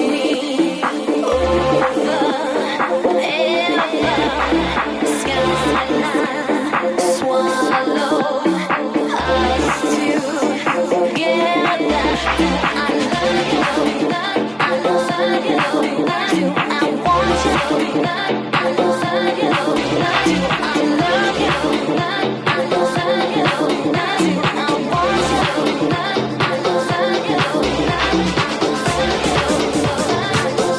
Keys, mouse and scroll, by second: 3.2 alt+z, 4.4 ctrl+z, 6.0 c, 8.1 alt+z, 8.5 alt+z, 8.6 c, 12.3 alt+z, 14.5 g, 18.3 right click, 18.8 g, 21.4 alt+right click, 21.9 alt+z, 22.2 c, 23.4 alt+z, 24.0 g, 27.2 shift+right click, 27.3-30.7 shift+middle drag, 27.8 g, 29.3 Tab.